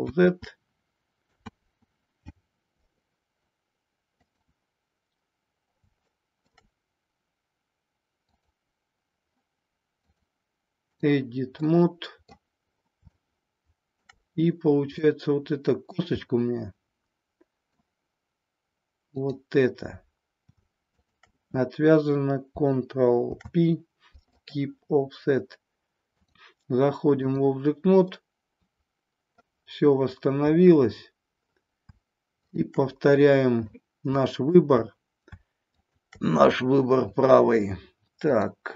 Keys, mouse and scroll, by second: 0.1 ctrl+z, 1.4 ctrl+z, 4.2 click, 6.0 shift+middle click, 10.0-11.0 drag, 11.5 middle click, 13.3 shift+middle click, 14.9 middle click, 16.2-17.8 middle drag, 19.0 click, 20.8 shift+click, 23.1 ctrl+p, 26.2-27.4 drag, 28.2-29.4 middle drag, 33.7-34.4 middle drag, 35.5 shift+click, 38.4-38.7 drag.